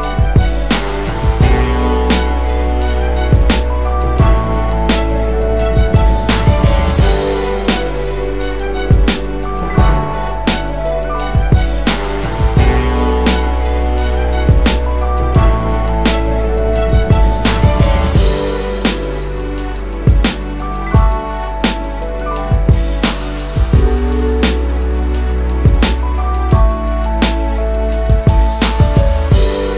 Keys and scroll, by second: 0.4 typing, 0.9 Return, 21.4 BackSpace.